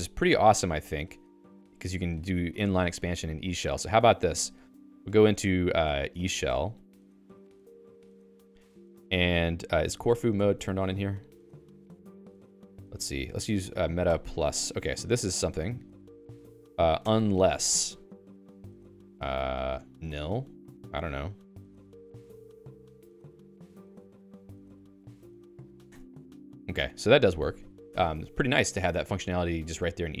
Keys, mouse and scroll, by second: 4.1 click, 4.2 q, 6.5-7.6 typing, 8.0 Return, 10.3 ctrl+alt+i, 11.8 Escape, 12.3 a, 14.5 alt++, 15.2 Down, 15.4 Down, 15.5 Down, 16.3 Down, 16.6 Down, 17.0 Return, 19.7-20.6 typing, 22.2 alt+}, 23.2-25.5 typing, 25.8 Return, 27.9 Escape.